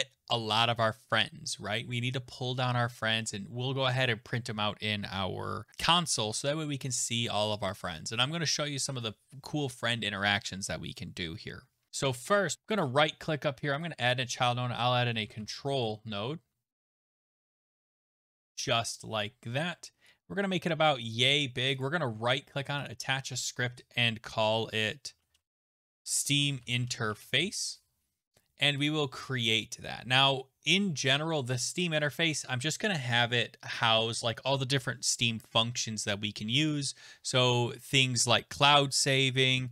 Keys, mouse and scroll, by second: 12.5 ctrl+z, 12.5 scroll down 10, 12.8 right click, 13.8 click, 14.9-17.9 typing, 18.5 Return, 21.1 click, 21.8 right click, 23.5 click, 24.8-27.8 typing, 28.8 click, 38.0-39.7 scroll.